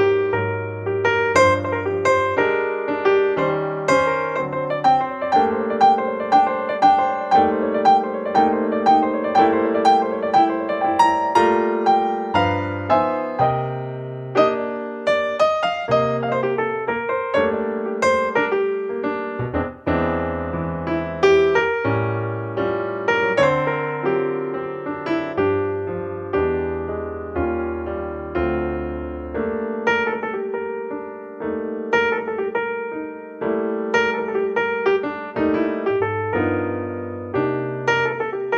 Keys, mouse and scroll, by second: 1.2-1.9 middle drag, 2.5 middle click, 4.6-6.6 middle drag, 5.8-7.7 drag, 7.1-7.8 middle drag, 8.0-8.8 middle drag, 8.8-9.4 drag, 9.4 middle click, 10.0-11.1 middle drag, 11.1-12.8 drag, 13.1-13.4 middle drag, 16.9-18.8 drag, 18.4-19.7 middle drag, 19.7-22.6 drag, 19.7-20.3 right drag, 22.0 middle click, 22.4 right click, 22.6-23.9 middle drag, 24.5-28.7 middle drag, 26.0 KP_1, 28.8-30.7 right drag, 33.3 right click, 35.8 ctrl+p.